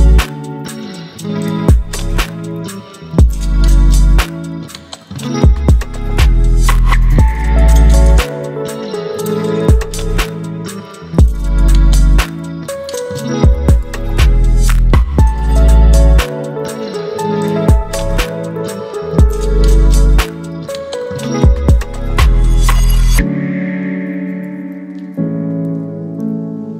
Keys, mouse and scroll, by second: 4.7 ctrl+0, 8.8-14.6 drag, 22.8-24.4 shift+drag, 26.3 ctrl+t.